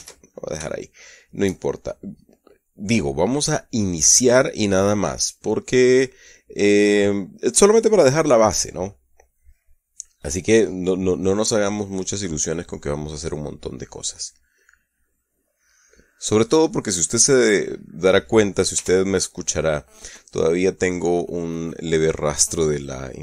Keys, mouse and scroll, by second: 0.4 ctrl+z, 1.1-2.0 shift+middle drag, 15.5-18.1 drag, 19.2 t, 22.1 click, 23.1 click.